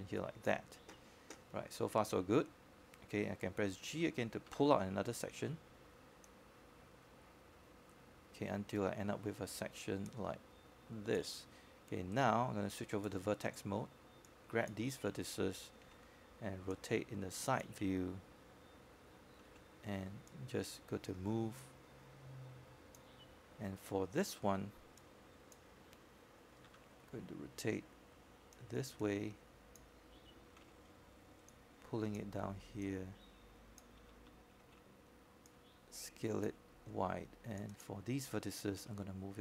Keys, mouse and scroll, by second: 6.2-9.5 drag, 13.5 g, 13.6 g, 15.3-20.5 drag, 21.3-22.5 right drag, 23.5 click, 25.1 e, 26.0-27.5 drag, 28.8 w, 29.6-35.5 drag, 36.1 e, 38.0-39.4 drag.